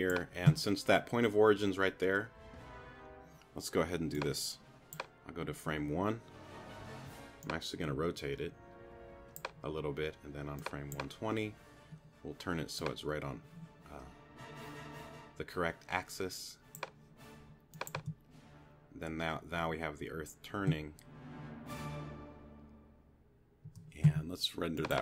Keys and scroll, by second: 18.0 space, 23.7 space.